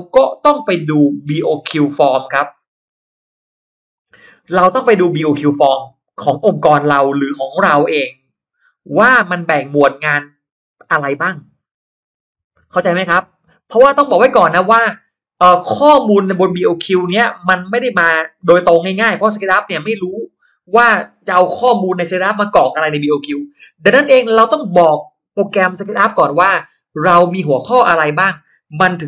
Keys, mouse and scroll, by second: 1.5 scroll down 1, 1.7 middle click, 2.9 click, 3.9 click, 5.7 shift+x, 6.2-10.5 shift+drag, 12.9 shift+click, 16.7-20.2 shift+drag.